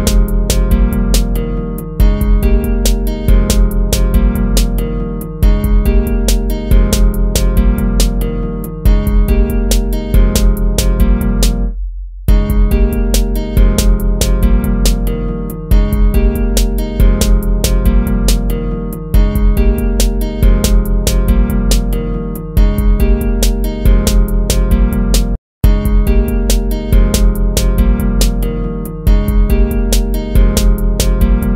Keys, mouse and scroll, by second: 4.3 ctrl++, 7.9 ctrl+-, 8.1 ctrl++, 9.9 ctrl+-, 11.9 ctrl++, 14.5 ctrl+-, 14.7 ctrl++, 16.1 ctrl+-, 19.1 ctrl+-, 19.3 ctrl++, 23.5 ctrl+-, 23.6 ctrl++, 24.4 ctrl+-, 25.0 ctrl+-, 26.6 ctrl+-, 31.2 ctrl++, 31.2 ctrl+-.